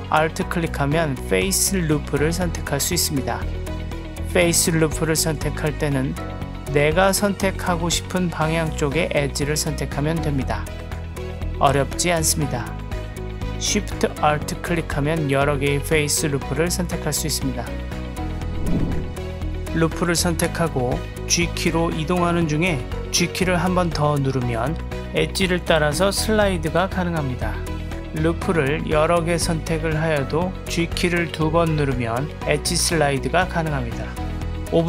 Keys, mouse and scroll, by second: 1.0 alt+click, 5.2 alt+click, 7.0 alt+click, 9.1 alt+click, 11.5 alt+shift+click, 13.1 alt+shift+click, 14.7 alt+shift+click, 16.1 alt+shift+click, 17.3 alt+shift+click, 18.7 click, 19.2 click, 20.4 alt+click, 21.1 g, 22.9 g, 28.7 alt+shift+click, 29.4 g, 34.5 alt+click.